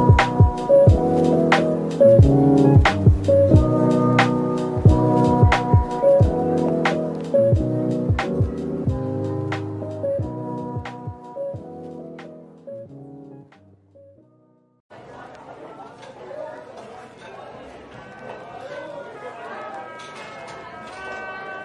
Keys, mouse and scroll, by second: 2.4-3.1 scroll down 1, 3.1 z, 10.2-11.2 scroll up 1, 11.2 z, 13.6-15.1 typing, 16.0 double click.